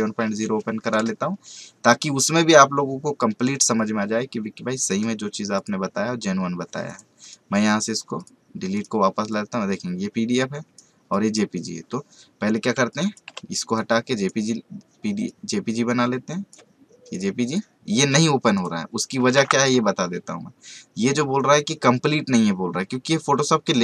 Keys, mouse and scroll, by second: 5.5 click, 7.2 right click, 8.1-17.1 drag.